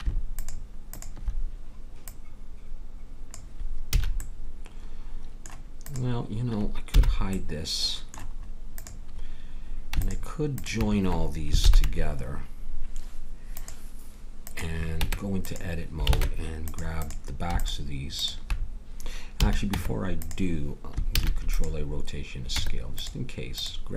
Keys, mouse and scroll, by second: 3.9 a, 5.8-7.8 drag, 6.9 h, 8.7-11.6 drag, 11.6 ctrl+j, 13.6-14.9 drag, 14.9 Tab, 16.1 ctrl+Tab, 19.4 a, 19.7 Tab, 21.1 ctrl+a, 22.5 Tab, 23.5-23.9 drag.